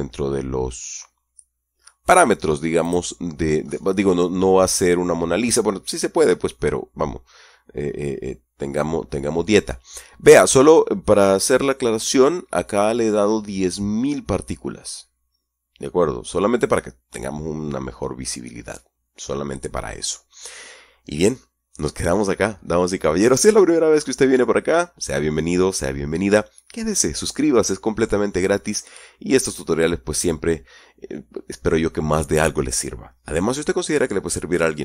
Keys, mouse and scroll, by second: 3.3 click, 4.1-6.0 scroll up 12, 6.6-6.9 scroll up 2.